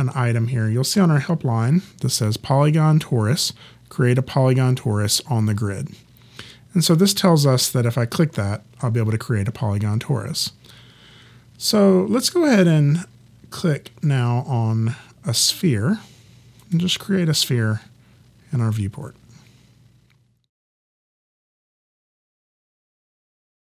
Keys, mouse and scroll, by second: 16.6 click.